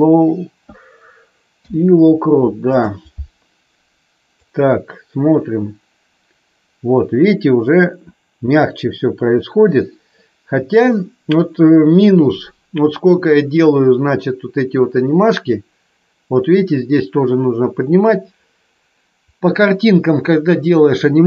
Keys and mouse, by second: 1.5 i, 4.5-21.2 drag.